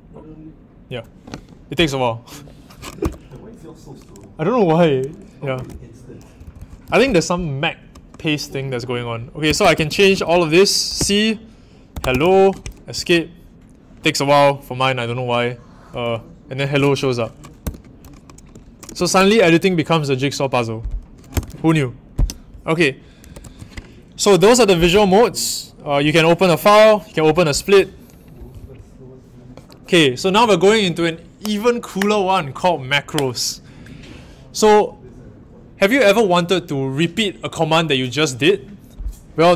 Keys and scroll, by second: 3.0 typing, 5.4-7.3 typing, 9.4-12.8 typing, 12.9 Escape, 17.6 typing, 21.3 Return, 23.3 super+Tab.